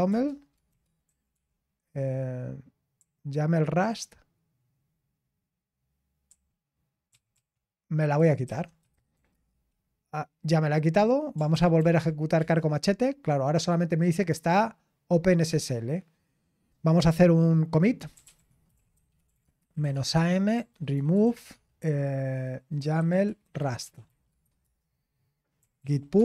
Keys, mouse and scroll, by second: 0.0-4.1 typing, 6.0-7.3 typing, 8.4-9.6 typing, 11.8 ctrl+p, 11.8-12.9 typing, 19.3-26.2 typing.